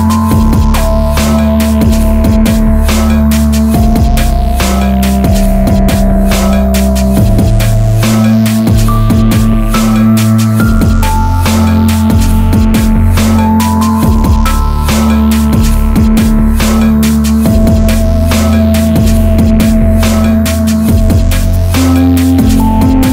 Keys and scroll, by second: 3.4 ctrl+-, 19.9 Escape.